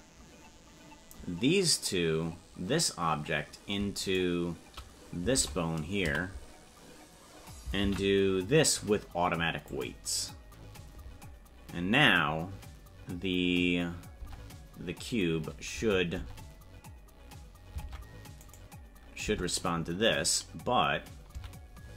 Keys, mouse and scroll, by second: 5.4 ctrl+Tab, 6.1 a, 18.5 right click, 19.2 Tab.